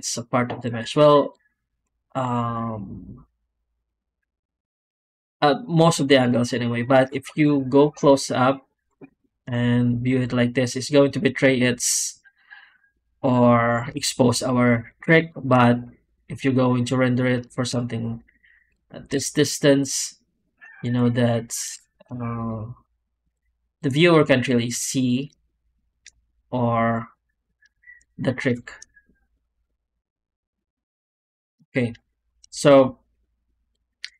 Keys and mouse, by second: 5.9 drag, 7.0 shift+middle click, 7.7 middle click, 9.1 shift+drag, 13.9 shift+click, 17.9-18.6 drag, 17.9-18.6 right drag, 25.3 shift+drag, 26.1 middle click, 31.3 shift+middle drag, 32.0 shift+middle drag.